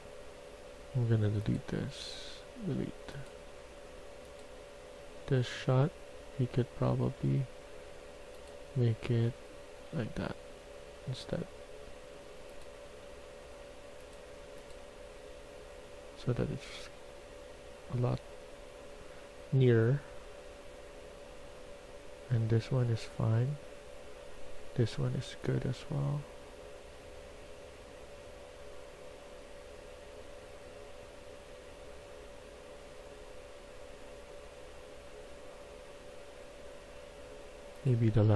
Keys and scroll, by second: 5.8 w, 6.1 w, 8.8 d, 9.3 d.